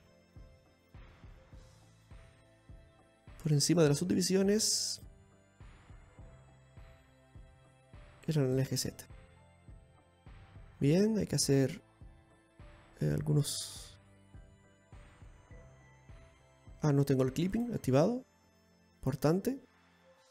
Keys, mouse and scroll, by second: 4.2 click, 5.3 click, 6.0-6.4 scroll up 4, 6.7 middle click, 9.0 click, 9.3 click, 9.9-10.6 scroll down 3, 10.3-11.6 scroll up 2, 10.6 middle click, 11.6 scroll down 2, 12.1-12.6 scroll up 3, 14.3 Tab, 15.1 right click, 16.0 click, 18.2 click.